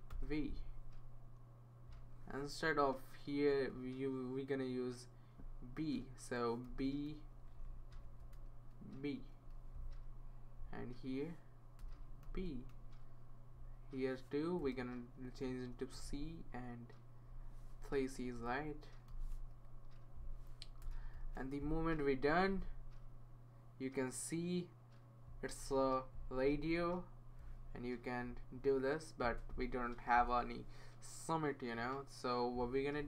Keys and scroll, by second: 0.1 super+v, 3.6 BackSpace, 6.7 b, 7.3 Right, 7.5 Right, 7.9 Right, 8.2 BackSpace, 9.0 b, 11.8 BackSpace, 12.2 b, 14.6 BackSpace, 15.5 c, 18.4 BackSpace, 19.1 c, 20.8-21.6 typing, 22.9 typing.